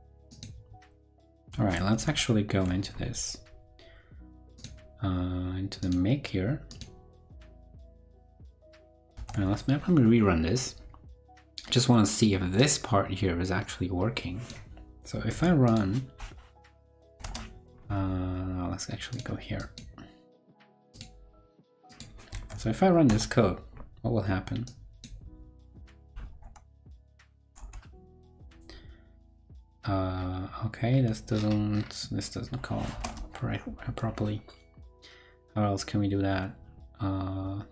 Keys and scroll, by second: 2.0 ctrl+super+Left, 9.1 super+r, 15.3 super+c, 22.3 super+v.